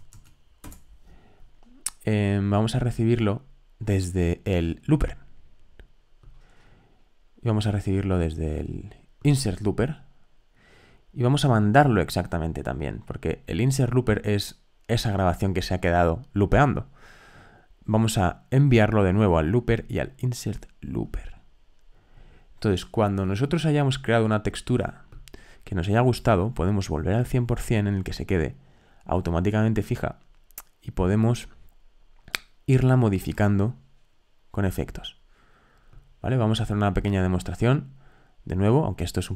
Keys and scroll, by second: 0.0-0.6 typing.